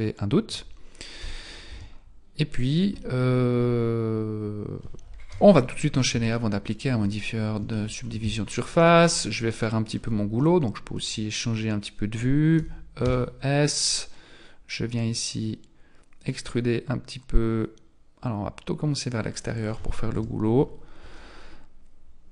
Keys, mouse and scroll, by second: 1.2 n, 1.7 Tab, 5.3 KP_1, 6.3 shift+middle click, 7.0-7.8 scroll up 3, 7.8 shift+middle click, 7.8 scroll up 1, 8.1 Tab, 8.8 alt+right click, 9.4 middle click, 10.4 middle click, 12.6 e, 20.1 KP_1.